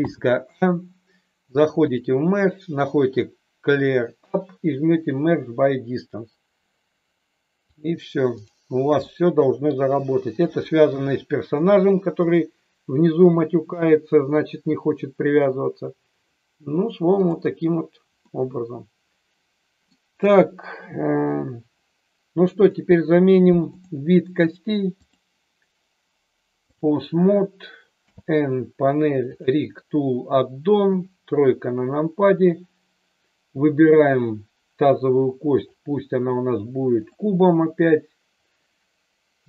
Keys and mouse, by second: 0.0 a, 1.8-6.9 drag, 7.8-8.5 drag, 9.2-9.6 middle drag, 10.8 KP_3, 12.2 click, 17.5 drag, 18.2-19.9 middle drag, 23.6 click, 25.0-26.7 drag, 28.0 n, 29.3 click, 30.8 KP_3, 35.7-37.0 drag, 37.8 click.